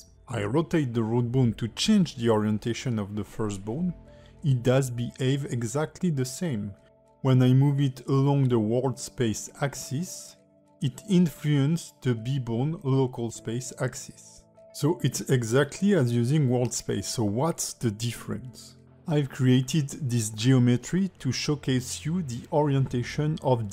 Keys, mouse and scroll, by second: 0.3 click, 0.8 r, 1.8 alt+middle click, 2.3 click, 3.2 click, 5.1 alt+middle click, 6.1 click, 7.7 alt+middle click, 9.0 click, 10.6 alt+middle click, 12.0 click, 12.6 g, 14.6 alt+middle click, 15.2 g, 17.2 alt+middle click, 17.8 g, 19.5 a, 19.9 alt+r, 20.1 alt+g, 20.4 alt+s, 20.8 middle click, 22.4 click, 23.2 click.